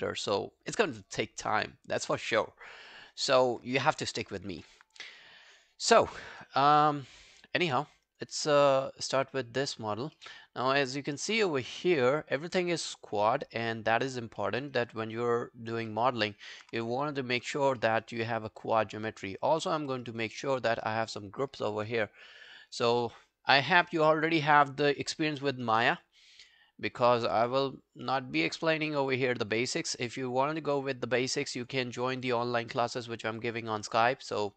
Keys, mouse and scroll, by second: 7.2 alt+click, 8.4 alt+middle click, 8.7 alt+right click, 8.9 alt+click, 10.2 alt+middle click, 10.5 alt+scroll down 1, 10.7 alt+click, 11.8 alt+middle click, 12.0 alt+right click, 12.3 alt+click, 12.6 alt+right click, 12.9 alt+middle click, 13.1 alt+right click, 13.3 alt+click, 14.4 alt+middle click, 14.7 alt+right click, 14.9 alt+click, 15.9 alt+middle click, 16.2 alt+right click, 16.4 alt+click, 17.2 alt+click, 17.8 alt+middle click, 18.0 alt+right click, 18.3 alt+click, 19.0 alt+middle click, 19.3 alt+right click, 19.5 alt+click, 19.8 alt+middle click, 20.1 alt+right click, 20.4 alt+middle click, 20.7 alt+right click, 26.5 shift+click, 27.0-34.5 shift+click.